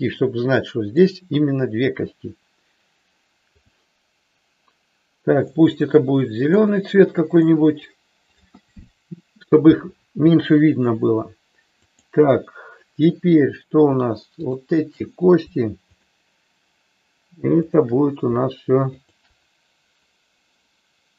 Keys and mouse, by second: 3.5 click, 5.3-6.6 drag, 7.3 click, 11.7-13.2 drag, 14.4 shift+click, 19.0 shift+click.